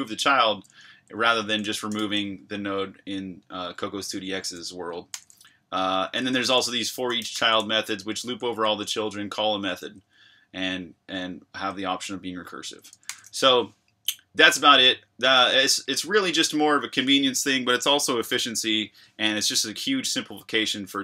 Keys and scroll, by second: 0.7 Escape, 1.2-2.5 typing, 4.1 Escape, 4.4-9.5 typing, 12.9 Escape, 13.0 j.